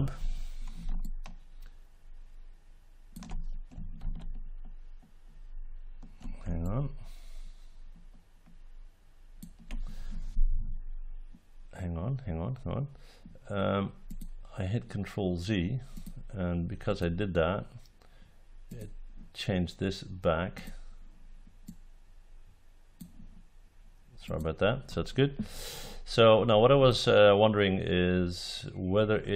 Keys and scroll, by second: 3.9 ctrl+z.